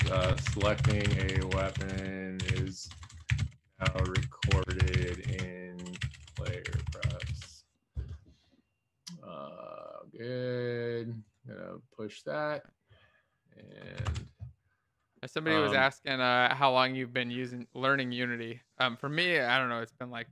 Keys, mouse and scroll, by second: 0.0-4.2 typing, 6.5-7.3 typing.